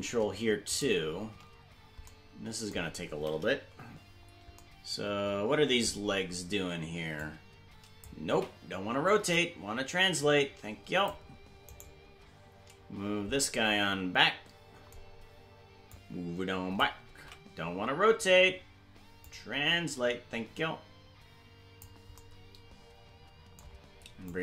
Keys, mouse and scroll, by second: 2.1 shift+right click, 4.1-4.6 scroll down 3, 7.2 click, 8.9 ctrl+z, 9.3-11.1 drag, 11.9 right click, 15.9 click, 17.7 ctrl+z, 19.2-21.8 drag, 24.3-24.4 drag.